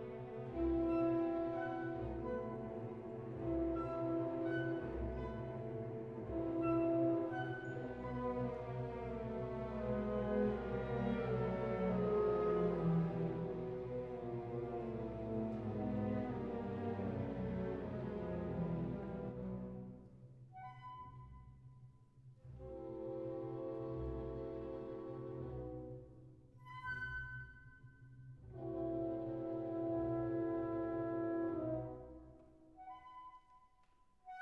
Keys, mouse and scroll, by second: 0.1 click, 1.5 g, 1.6 z, 3.0 click, 4.6 s, 7.0 click, 7.2 g, 7.3 z, 10.1 click, 15.7 g, 15.9 y, 18.3 click, 22.3 Tab, 22.6 ctrl+a, 23.9 click, 25.8-28.6 drag, 29.4 click, 30.4 click, 31.1 click, 31.9 shift+a.